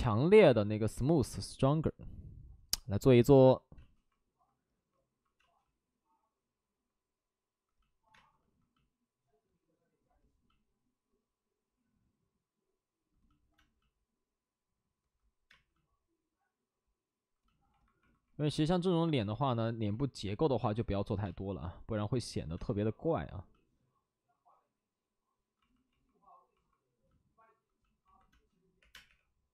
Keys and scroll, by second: 3.7 space, 5.3 space, 8.1 space, 13.5 space, 15.4 space, 22.5 space, 28.7-29.5 typing.